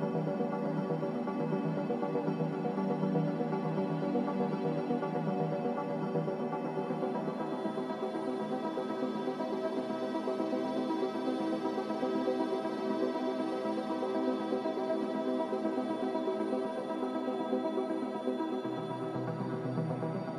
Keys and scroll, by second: 13.4 ctrl+w.